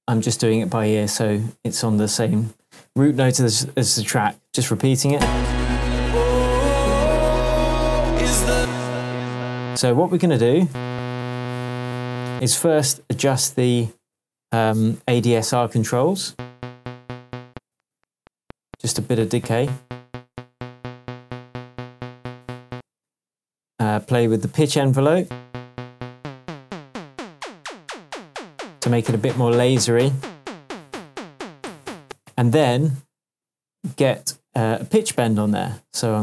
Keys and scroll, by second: 0.8 super+d, 5.1 super+space, 5.9 shift+Tab, 9.7 space, 12.3 space, 16.3 space, 22.7 space, 25.2 space, 32.0 space.